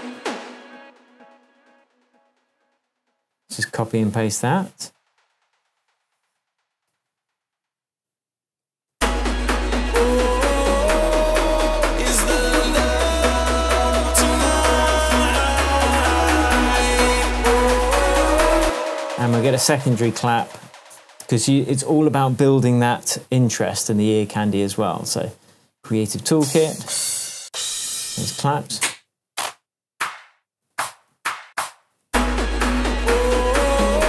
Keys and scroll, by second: 0.1 a, 4.4 super+c, 6.9 super+c, 8.6 super+v, 8.9 super+space, 9.7 space, 18.6 space, 19.1 super+space, 19.3 super+t, 26.7 Down, 28.4 Right, 28.7 Down, 30.6 Up, 31.1 Down, 31.4 Up, 32.0 space.